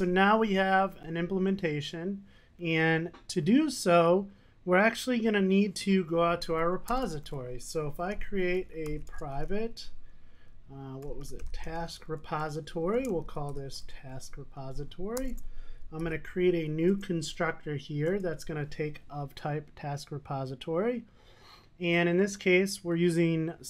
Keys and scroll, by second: 12.6 Return, 16.3 super+n.